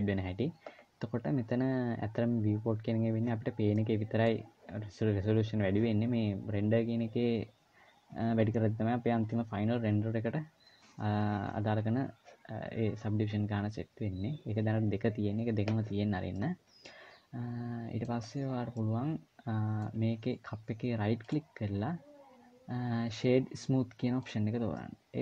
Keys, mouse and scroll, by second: 3.5 middle click, 16.1 middle click, 17.9-18.5 scroll up 2, 18.5 middle click, 20.7-21.0 scroll down 2, 21.0 right click, 24.5 middle click.